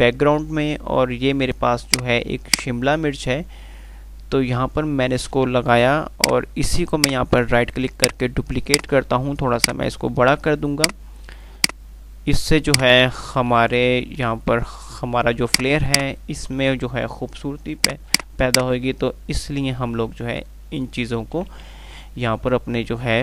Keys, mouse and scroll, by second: 0.0 F3, 2.1-5.6 drag, 8.2 right click, 8.9 click, 12.9-13.6 shift+click, 14.1 r, 14.8 F2, 15.7 click, 15.9 F2, 16.1 click, 16.4-16.9 F2, 17.8 click, 20.9 shift+click, 22.0 r, 22.4 r.